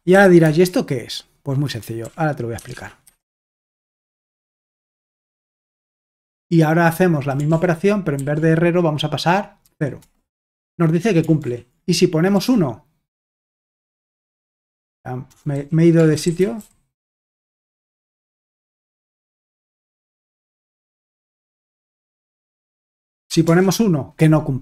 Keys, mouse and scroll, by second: 0.0-0.4 typing, 2.0-2.7 typing, 3.0 Escape, 4.1 shift+;, 4.4 w, 4.5 Return, 5.0 alt+Tab, 7.5 ctrl+p, 8.2 ctrl+w, 9.6 0, 10.0 Return, 10.3 j, 11.4 ctrl+o, 12.4 ctrl+p, 14.0 ctrl+c, 14.7-19.2 typing, 20.3 Return, 20.5-21.3 typing, 22.3-23.5 typing.